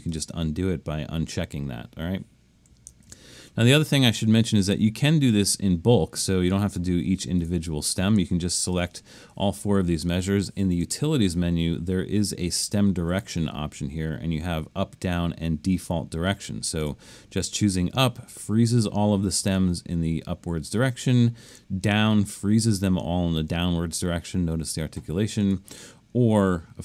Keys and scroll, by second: 3.1 super+-.